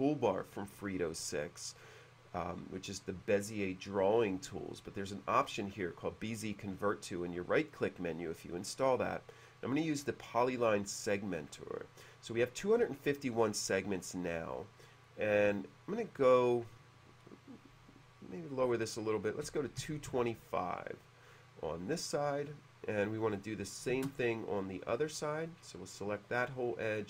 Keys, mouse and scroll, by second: 10.2-11.4 drag, 19.5 Num_Lock, 19.5 KP_2, 20.2 Num_Lock, 20.2 KP_2, 20.3 KP_5, 21.9 click, 25.0 click, 25.0 space, 25.2 click, 25.4 click, 25.9 right click.